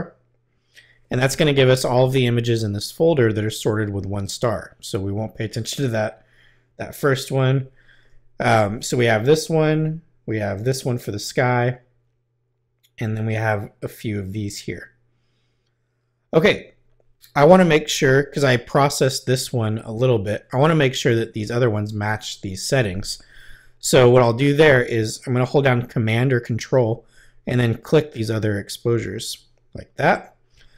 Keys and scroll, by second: 9.5 Right, 11.1 Right, 13.0 Right, 14.3 Right.